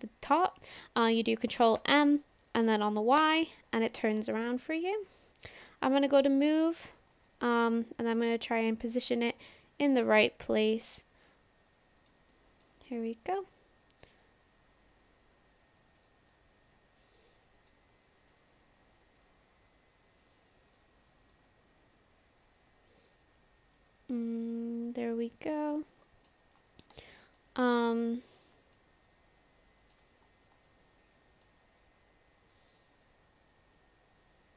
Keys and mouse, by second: 1.7 ctrl+m, 2.9 y, 3.2 Return, 4.4 shift+middle click, 6.1 click, 7.3-7.7 middle drag, 8.3 click, 10.2 click, 11.3 middle click, 12.3 middle click, 13.8-15.7 drag, 16.0 click, 16.3-17.7 middle drag, 18.3 click, 19.2-20.8 drag, 21.0 click, 21.3-26.3 middle drag, 27.1 shift+middle drag, 27.8 click, 28.5 s, 28.8-29.9 middle drag, 29.9-30.7 drag, 31.1 click, 31.4-34.5 drag.